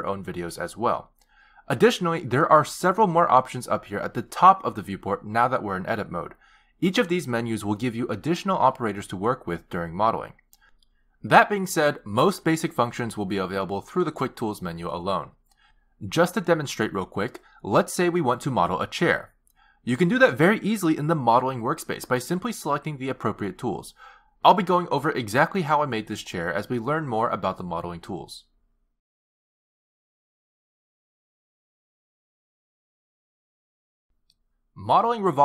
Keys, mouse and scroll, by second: 7.3 click, 9.1 click, 10.9 click, 15.1-15.5 scroll down 3, 15.8 click, 16.1 click, 16.7 click, 16.9 click, 17.4 click, 17.8 click, 18.3 click, 18.8 click, 19.1 a, 19.2 s, 20.1 click, 20.5 click, 20.6 shift+click, 20.8 click, 20.9 z, 21.3 shift+click, 21.7 shift+click, 21.9 shift+click, 22.2 shift+click, 22.7 click, 23.3 click, 23.8 g, 25.4 middle click, 25.4 z, 26.5 g, 26.7 s, 27.0 g, 27.2 middle click.